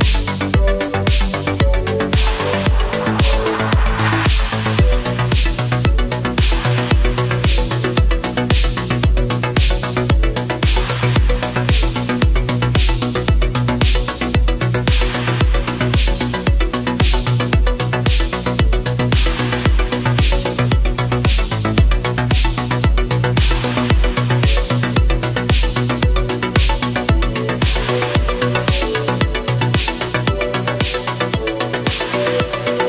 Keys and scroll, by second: 0.2 ctrl+z, 0.6 ctrl+z, 1.8 ctrl+z, 2.7 ctrl+z, 3.8 ctrl+z, 4.8 space, 6.0 ctrl+z, 7.2 ctrl+z, 8.6 ctrl+z, 10.8 space, 11.2 space, 14.7 ctrl+z, 14.9 ctrl+z, 15.2 space, 16.1 space, 17.0 ctrl+z, 17.7 ctrl+z, 18.9 ctrl+z, 20.4 ctrl+z, 22.1 space, 24.0 ctrl+z, 25.4 space, 27.2 ctrl+z, 28.5 ctrl+z, 29.1 ctrl+shift+z, 31.5-31.8 scroll.